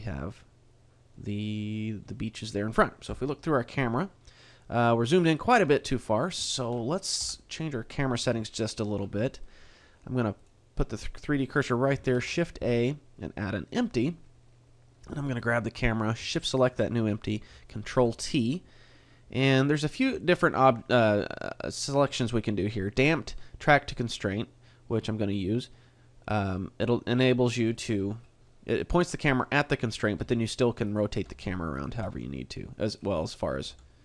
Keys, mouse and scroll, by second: 1.7 middle click, 3.1 KP_0, 5.5 middle click, 6.5 shift+middle click, 7.2 KP_3, 8.1-9.2 scroll up 2, 9.2 shift+middle click, 10.3 click, 12.1 shift+a, 15.4 right click, 16.5 shift+right click, 17.9 ctrl+t, 28.7 right click, 29.1 middle click, 30.2 r, 30.9 right click, 31.1 g, 32.9 right click, 32.9 r, 33.1 middle click, 33.7 r.